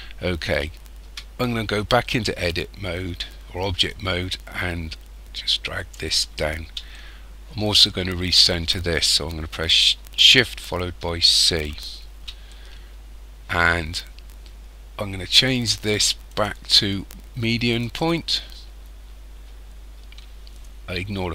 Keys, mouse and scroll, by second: 1.0 Tab, 3.9 click, 6.9 shift+middle click, 11.0 shift+c, 12.5 shift+middle click, 16.3 click.